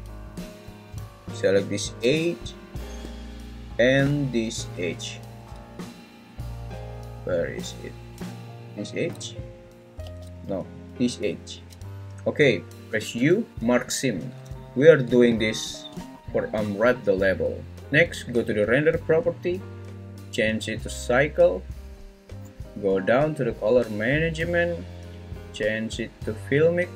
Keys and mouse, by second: 10.0 ctrl+z, 13.1 u, 14.5 `, 20.6-21.8 drag, 24.3 click, 26.3-26.9 drag.